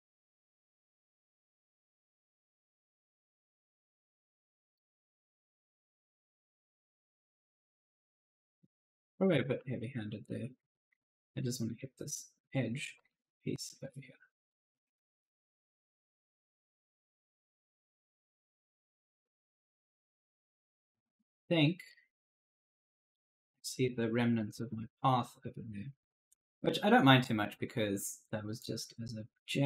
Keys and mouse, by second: 0.0-1.0 typing, 1.3 click, 2.9-4.3 typing, 3.1 right click, 4.9 click, 6.5-7.7 typing, 6.6 right click, 8.3 right click, 8.8 ctrl+z, 9.2-13.5 typing, 9.4 right click, 10.7 right click, 11.5 right click, 12.8 right click, 14.3 click, 15.5 right click, 15.7 d, 16.2 click, 17.4 right click, 17.7-21.7 typing, 20.4 right click, 22.9 click, 24.4 click, 28.4 click.